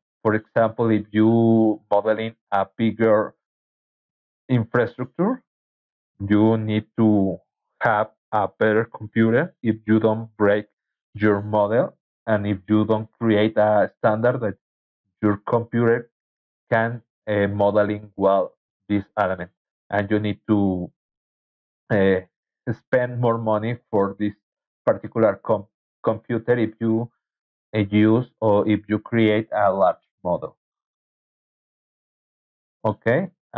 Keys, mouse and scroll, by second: 8.5 scroll down 2, 11.9 scroll down 2, 13.3 scroll down 2, 15.5 scroll down 2, 16.9 scroll down 2, 18.2 scroll down 2, 18.7-20.8 scroll up 7, 21.0-22.0 scroll up 3, 24.1-25.3 drag, 32.2 click.